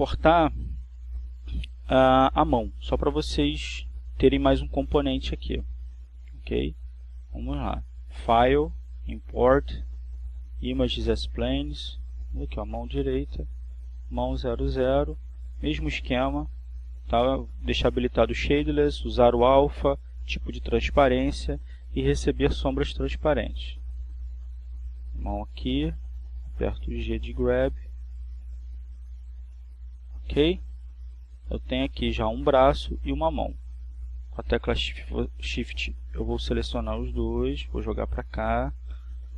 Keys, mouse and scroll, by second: 8.9 click, 11.6 click, 13.4 click, 14.6 click, 16.0-16.9 drag, 24.7 click, 26.9 g, 30.0 click, 35.2 shift+right click, 37.6 g.